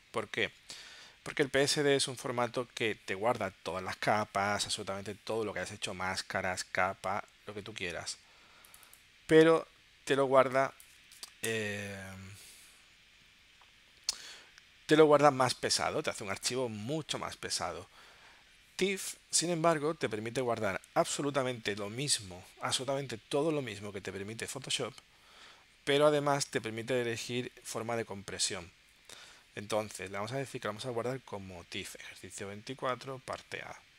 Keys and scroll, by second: 11.5 BackSpace.